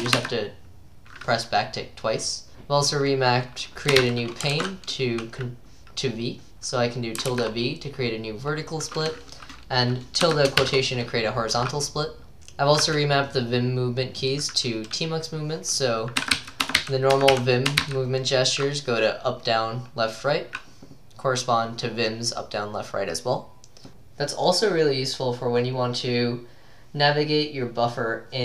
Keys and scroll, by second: 4.0-4.9 typing, 4.5 ctrl+d, 7.3-8.2 typing, 9.4 ctrl+d, 10.6 typing, 12.3 typing, 16.1-19.0 typing.